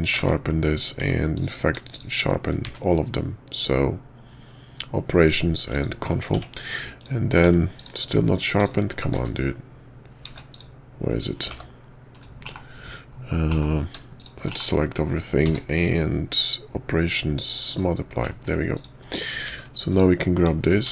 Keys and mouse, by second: 0.2 Tab, 1.0 Tab, 1.3 click, 1.9-2.4 shift+drag, 2.6 q, 6.3 Tab, 7.0 click, 7.4 Tab, 7.8 click, 8.6 click, 9.1 q, 10.5 click, 11.5 g, 12.4 /, 13.5 /, 14.1 shift+click, 14.7 /, 15.4 q, 18.3 shift+middle click, 18.7 click, 19.5 Tab, 19.9 click.